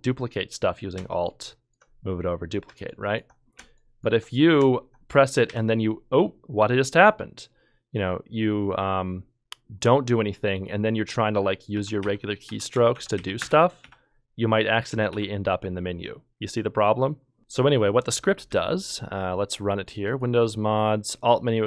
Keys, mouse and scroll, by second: 1.5 alt+click, 2.9 Delete, 2.9 alt+click, 5.5 f, 11.5-13.8 typing, 15.1 s, 17.4 ctrl+shift+F1, 17.4 Escape, 18.5 ctrl+F2.